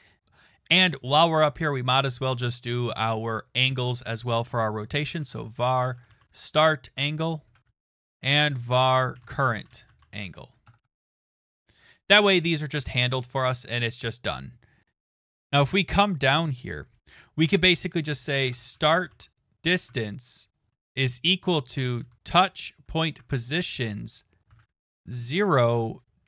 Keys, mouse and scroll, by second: 4.7-11.9 typing, 14.7-15.4 typing, 14.9 click, 15.3 click, 15.3 scroll, 16.9 click, 17.0 click, 17.0 scroll, 17.8-22.4 typing, 23.2 Tab, 24.8-26.2 typing.